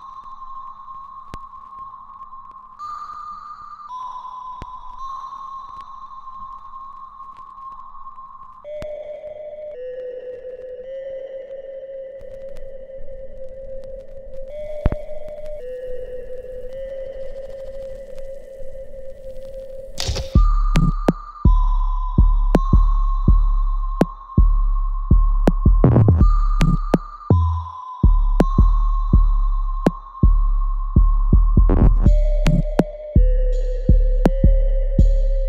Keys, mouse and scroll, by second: 0.2 alt+middle click, 1.0-2.7 alt+drag, 2.7 alt+middle click, 3.5-5.4 alt+right drag, 5.4 alt+middle click, 6.7-11.1 alt+right drag, 11.1 click, 12.3-17.4 ctrl+drag, 17.4-20.1 alt+drag, 20.1 alt+click, 21.1 right click, 21.9 click, 22.1 alt+right click, 22.7 alt+click, 23.7 alt+right click, 24.1 alt+middle click, 24.5 right click, 25.3 click, 26.4 shift+right click, 27.9 alt+click, 28.6 alt+right click, 29.2 alt+middle click, 29.7 alt+right click, 30.4 right click, 31.5 alt+middle click, 32.3 right click, 33.1 click, 34.0 alt+right click, 34.6-35.4 alt+drag.